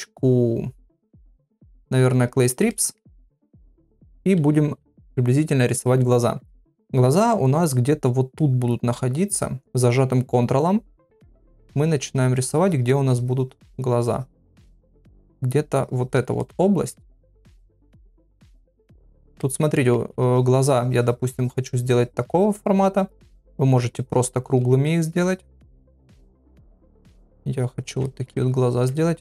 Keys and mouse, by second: 2.7 middle click, 3.2 ctrl+middle click, 4.1-5.0 [, 6.5 middle click, 8.4 middle click, 10.8 ctrl+click, 11.2 ctrl+click, 11.6 ctrl+click, 11.8 ctrl+click, 12.2 ctrl+click, 12.6 ctrl+click, 12.9 ctrl+click, 13.9 ctrl+click, 14.9 ctrl+click, 15.7 ctrl+click, 16.4 middle click, 17.3 ctrl+click, 18.4 middle click, 18.8 shift+click, 19.4 middle click, 19.8 ctrl+middle click, 20.3-22.2 ctrl+drag, 22.3 ctrl+click, 22.5 ctrl+click, 22.7 ctrl+click, 22.9 ctrl+click, 23.3 ctrl+click, 23.8 ctrl+click, 24.4 ctrl+click, 25.0 shift+click, 25.6 middle click, 26.2 ctrl+click, 27.0 middle click, 27.6 ctrl+click, 28.0 ctrl+middle click, 28.5 ctrl+click.